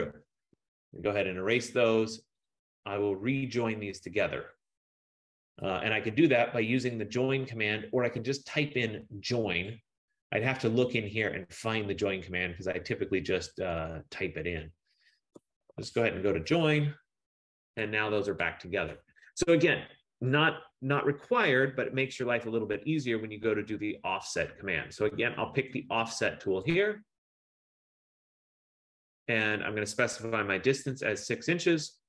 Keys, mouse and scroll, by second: 0.3-1.5 typing, 2.6 click, 4.6 click, 5.9 typing, 9.8 click, 15.2-16.3 typing, 16.6 Return, 17.8 click, 18.5 click, 26.8 click, 30.9 Return.